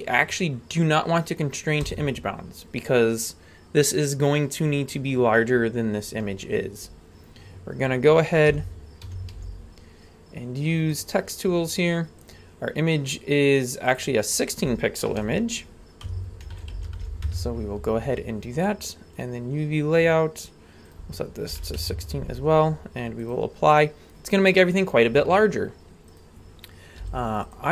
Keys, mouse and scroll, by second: 5.9-6.5 scroll down 1, 6.5-7.0 scroll down 1, 8.5 t, 9.0 t, 9.3 n, 10.9-14.0 drag, 14.3-17.3 drag, 19.2 click, 20.9 click, 23.2 click, 23.9-25.5 scroll down 2, 25.5-26.1 scroll up 1, 26.1 right click, 26.5-27.7 scroll down 2, 27.0 g.